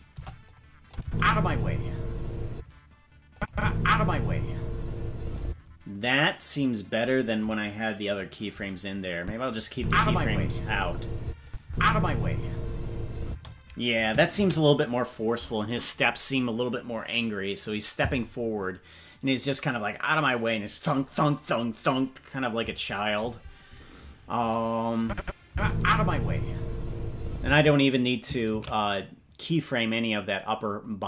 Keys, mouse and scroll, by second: 0.0 Delete, 0.8-2.9 drag, 1.0 space, 2.5 space, 3.3 click, 3.5 space, 5.4 space, 9.2 click, 9.7 space, 11.2 space, 11.4 click, 11.6 space, 13.2 space, 16.7 ctrl+s, 25.0 click, 25.4 space, 27.4 space, 30.7 ctrl+s.